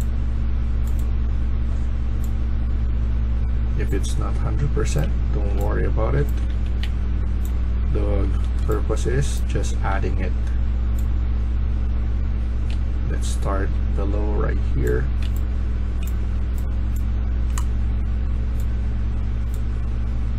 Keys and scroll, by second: 4.5-9.9 typing, 12.3-13.6 typing, 15.1 a, 15.6 a, 15.7 a, 15.8-16.4 a.